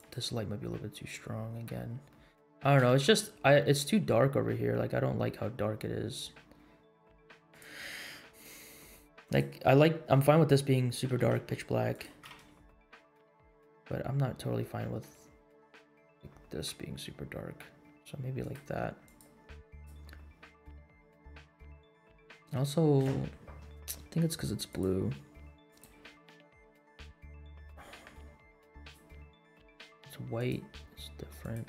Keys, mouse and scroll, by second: 2.0 middle drag, 2.5 g, 8.4 g, 10.7 middle click, 11.0 r, 12.0 g, 19.0 click, 19.6 click, 24.6-25.8 drag, 26.4-26.7 middle drag, 26.9 scroll down 2, 27.2 middle click, 28.8-29.8 drag, 30.3 click.